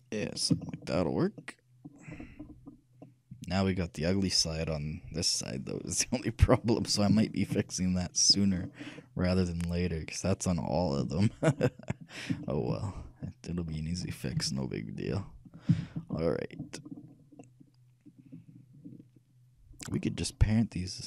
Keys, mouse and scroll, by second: 6.0-11.1 middle drag, 11.3-15.2 shift+middle drag, 14.5 shift+KP_3, 15.4 KP_1, 16.0 ctrl+KP_3, 16.9-17.7 scroll up 1, 17.7 ctrl+middle click, 18.3 scroll up 1, 18.5-20.6 ctrl+middle drag.